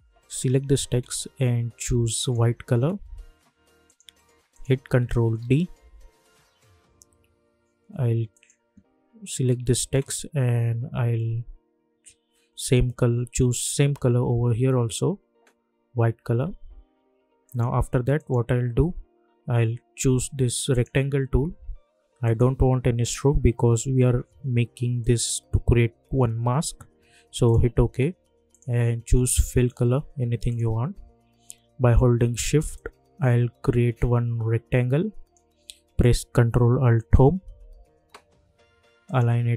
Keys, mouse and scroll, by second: 2.2 click, 5.4 ctrl+d, 8.3 click, 17.4 click, 20.7 click, 25.0 click, 27.4 click, 32.7-37.0 shift+drag, 37.0 ctrl+alt+Home, 39.0 click.